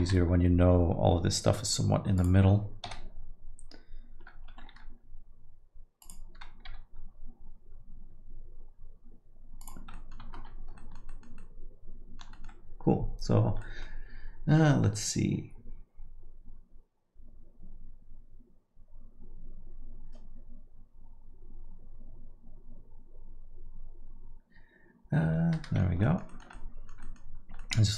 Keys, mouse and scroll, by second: 0.2 g, 2.9 KP_7, 4.5 r, 6.7 g, 10.0 middle click, 10.4 Tab, 10.8 alt+middle click, 11.1 middle click, 11.8 alt+middle click, 12.3 middle click, 13.6 middle click, 25.5 middle click, 25.9 scroll down 1, 26.0 alt+middle click, 26.3 middle click, 26.7 middle click, 27.0 middle click, 27.4 scroll up 2, 27.6 alt+middle click.